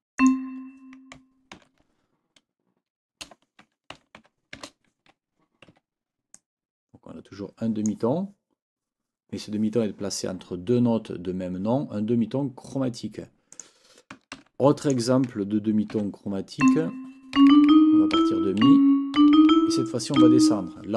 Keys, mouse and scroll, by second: 0.2 click, 1.5 ctrl+t, 4.6 shift+t, 5.7 Escape, 6.3-8.0 drag, 13.5 click, 14.4 ctrl+c, 14.8 ctrl+click, 15.9 ctrl+v, 16.6 click, 17.4 Up, 18.6 Right, 19.2 Up, 20.2 Down.